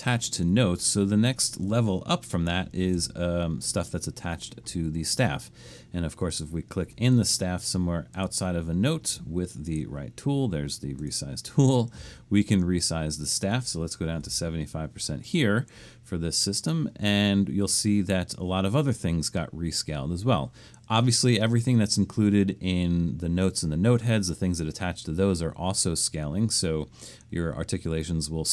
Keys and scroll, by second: 0.5 super+-, 2.8 super+-, 13.9-14.7 typing.